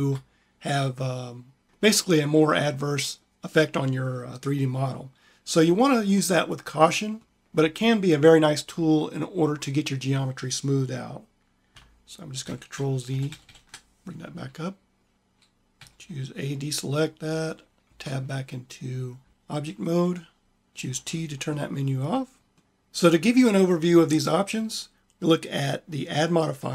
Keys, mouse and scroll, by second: 12.3 ctrl+z, 12.9 ctrl+z, 13.1 ctrl+z, 13.3 ctrl+z, 14.3 click, 15.6 a, 16.9 click, 17.7 Tab, 20.7 t, 22.0 click, 22.5 click.